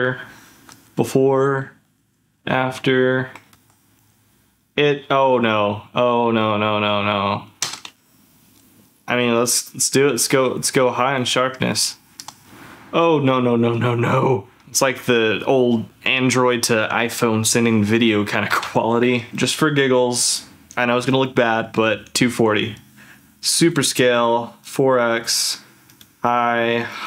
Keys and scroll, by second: 0.7 ctrl+shift+z, 2.3 ctrl+z, 7.8 ctrl+f, 11.8 ctrl+f, 19.3 ctrl+f.